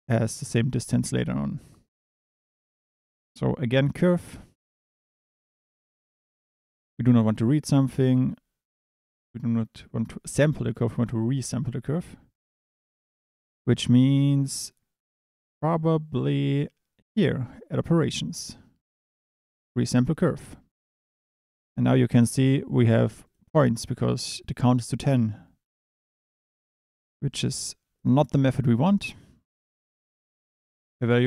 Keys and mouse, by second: 3.0 shift+a, 20.4 click, 22.8 click, 25.0-28.0 drag, 28.2 click, 28.9-30.6 drag.